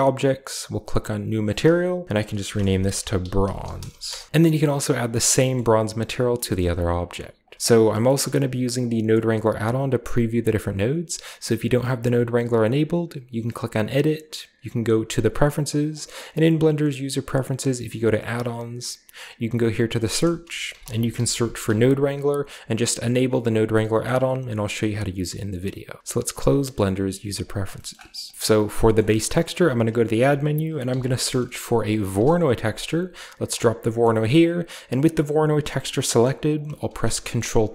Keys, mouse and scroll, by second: 0.6-1.2 drag, 1.3 click, 2.3-4.3 typing, 3.9 Return, 4.3-5.2 drag, 5.5-7.0 shift+middle drag, 5.5-6.0 shift+scroll down 1, 6.0-7.3 scroll down 1, 6.6 typing, 7.0-7.6 drag, 9.9 right click, 13.3 click, 14.8 click, 15.8 click, 18.1 click, 19.8 click, 20.6-21.5 typing, 21.9-22.3 drag, 26.0 click, 26.3 scroll down 1, 26.6 scroll up 1, 27.1 a, 27.3 click, 27.7 scroll up 1, 28.3 shift+scroll down 1, 28.5 shift+middle click, 28.5-29.4 shift+scroll up 1, 28.9 middle click, 29.2-30.0 shift+middle drag, 29.5 shift+a, 30.0 click, 30.8 typing, 32.0 Return, 33.4 click, 33.6-34.5 scroll down 2, 34.5-35.9 drag, 36.9 ctrl+t, 37.6 a.